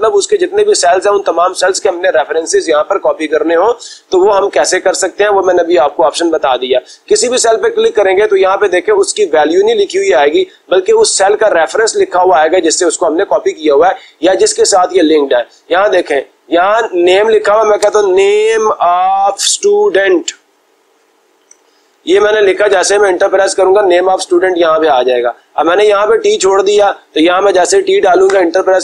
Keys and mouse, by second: 4.3-5.3 drag, 7.1-9.0 drag, 16.3 click, 16.6 click, 18.1-22.4 typing, 22.7 Return, 25.1 click, 26.1 click, 26.4 click, 27.5 t, 28.3 Return.